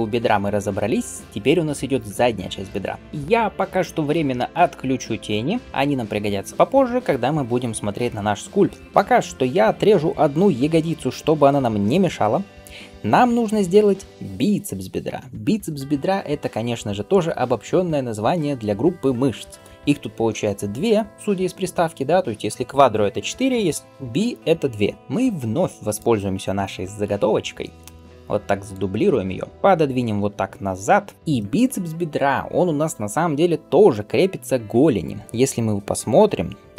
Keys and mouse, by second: 3.0-20.6 drag, 25.0-29.2 middle drag, 27.5 shift+d, 29.8 g.